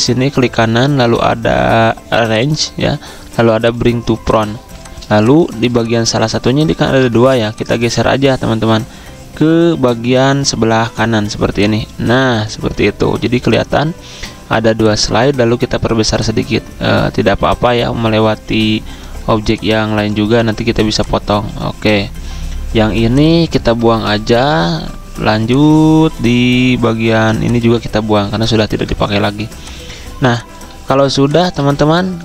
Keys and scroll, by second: 4.6 z, 5.6 v, 6.8 ctrl+z, 24.0 Delete, 28.1 End, 28.6 Delete, 31.1 v, 31.6 a.